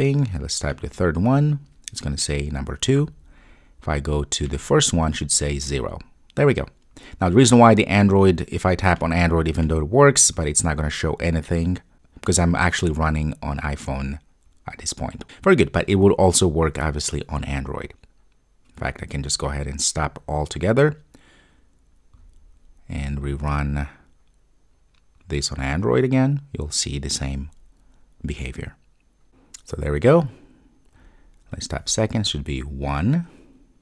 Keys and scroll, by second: 20.2 super+F2, 25.2 ctrl+r.